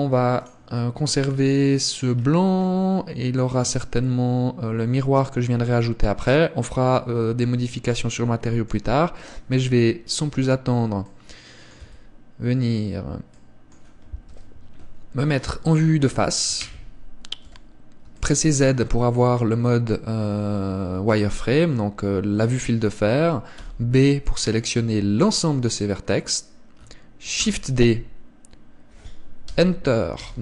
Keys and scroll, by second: 12.1 Tab, 14.6 KP_1, 16.9 z, 17.7 a, 23.9 b, 27.7 shift+d.